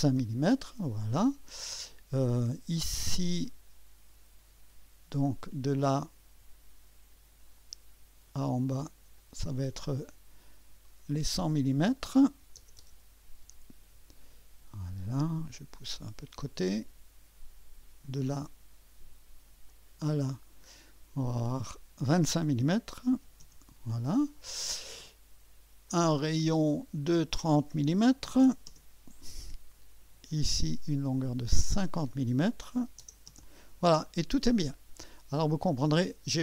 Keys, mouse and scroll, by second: 0.0-0.3 typing, 3.4-4.2 drag, 5.2 click, 7.5 click, 9.2 click, 10.8 click, 11.6 click, 12.0-13.9 typing, 16.0-16.9 drag, 18.0 click, 19.7 click, 21.7 click, 22.7-23.6 typing, 25.9 click, 27.0-28.1 drag, 28.1 3, 28.4 0, 28.7 Return, 30.3-32.8 drag, 32.8-33.3 typing, 33.3 Return.